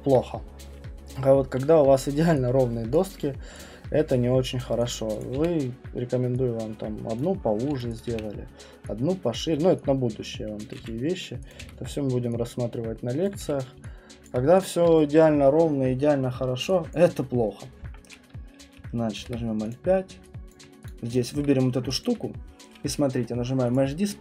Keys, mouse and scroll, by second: 0.2 middle click, 0.3 middle click, 1.1 middle click, 2.3 middle click, 2.9 click, 3.3 alt+middle click, 4.8 click, 5.2 click, 5.4 r, 7.2 click, 7.7 q, 8.0 click, 8.1 r, 9.3 click, 9.4 w, 10.6 click, 10.8 q, 11.5 click, 11.6 w, 13.2 click, 13.4 q, 14.2 alt+click, 14.6 click, 16.2-16.7 scroll, 16.9 alt+click, 18.8 middle click, 19.2 alt+5, 19.7 click, 20.5 alt+click, 20.8 click, 21.5 middle click, 21.5 middle click, 22.1 alt+click, 23.7 click.